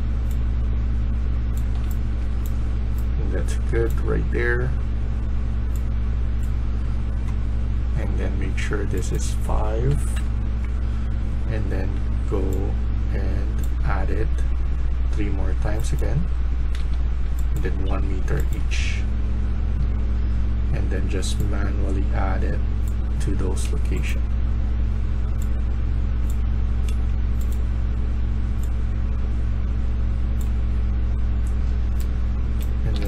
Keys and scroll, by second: 1.4-3.6 typing, 9.8 5, 10.0 Return, 16.7 3, 17.7 1, 18.8-20.4 typing, 30.2-31.1 typing, 32.2-33.0 typing.